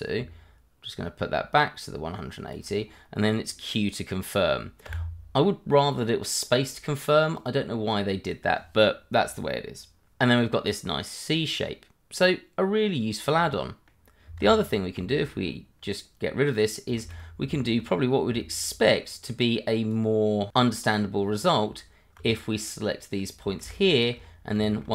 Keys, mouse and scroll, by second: 0.3 shift+click, 4.8 q, 5.7 middle click, 7.3 click, 11.4 middle click, 14.4 ctrl+z, 15.1 shift+middle click, 15.1 middle click, 15.4-16.5 scroll up 1, 16.5 click, 17.0 shift+z, 17.6 shift+middle click, 18.0 scroll up 1, 18.4 shift+middle click, 19.0 click, 22.3 scroll down 1, 22.5 middle click, 23.6 shift+z, 24.2-24.5 scroll up 1.